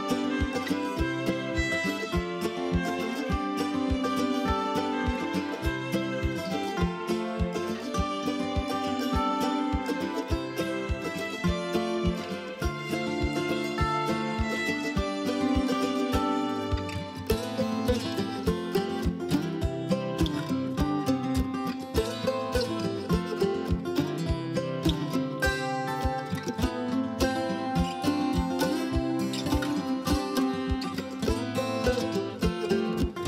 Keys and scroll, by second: 6.9 ctrl+shift+e, 13.5 ctrl+shift+e, 13.7 Delete, 19.2 ctrl+j.